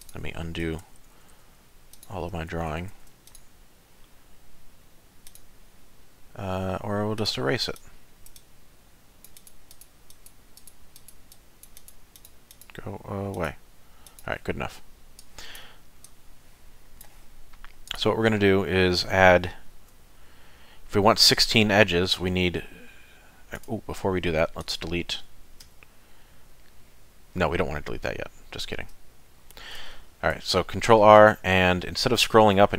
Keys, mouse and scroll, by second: 19.7 ctrl+r, 24.4 3, 24.6 click, 25.6 x, 29.3 shift+middle click, 30.2 ctrl+r.